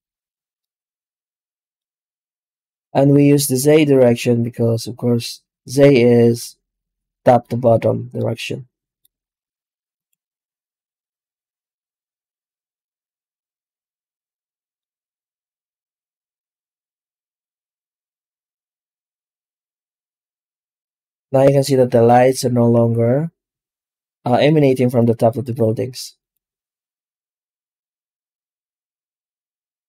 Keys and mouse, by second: 0.5-1.6 middle drag, 1.8 z, 8.1-8.8 middle drag, 9.0 z, 14.2-14.6 middle drag, 18.6-18.9 middle drag, 19.6 z, 24.5 z, 25.4 z.